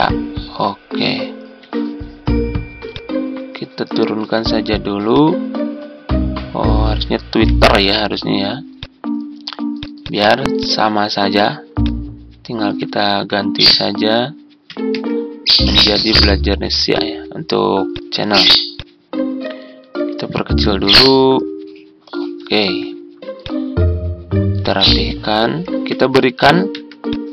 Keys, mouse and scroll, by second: 7.3 Home, 13.0 BackSpace, 14.6 Delete, 14.8 Return, 26.6 shift+z.